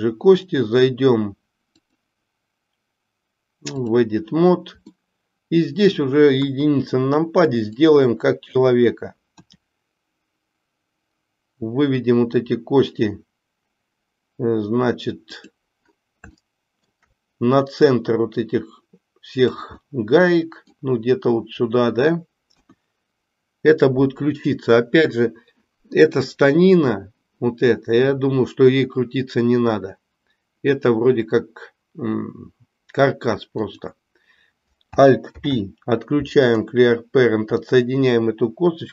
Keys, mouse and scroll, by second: 1.9-4.0 drag, 4.9-6.0 middle drag, 7.6 click, 9.4 e, 16.5 shift+middle click, 18.1-19.5 drag, 19.7-20.7 middle drag, 33.5 click, 35.3 alt+p.